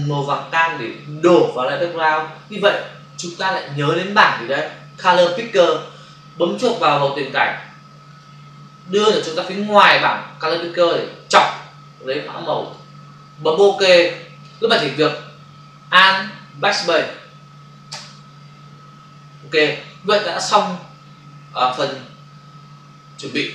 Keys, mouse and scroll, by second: 8.1 click, 12.5 click, 13.8 click, 17.9 alt+BackSpace.